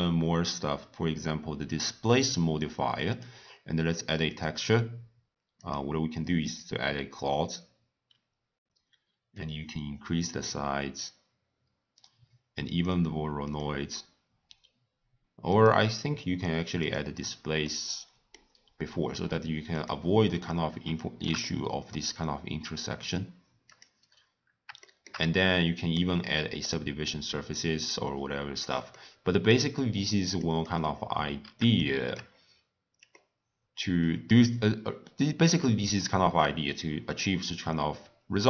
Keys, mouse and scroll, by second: 1.9 drag, 3.1-4.4 drag, 5.6-8.6 drag, 9.3-12.5 drag, 13.4 click, 15.5-16.9 drag, 17.6-19.7 middle drag, 19.7 click, 20.3-20.8 scroll up 2, 20.8 scroll down 3, 20.9-21.3 shift+middle drag, 21.3 scroll up 1, 21.4-23.6 middle drag, 23.6 click, 24.1 scroll down 1, 24.2-24.8 scroll up 1, 24.8-26.6 shift+middle drag, 26.6 click, 28.1-28.9 drag, 28.9 scroll down 1, 28.9-30.2 middle drag, 30.2 click, 30.6 click, 31.8-32.4 shift+middle drag, 32.4-33.1 scroll down 1, 33.1-36.2 middle drag.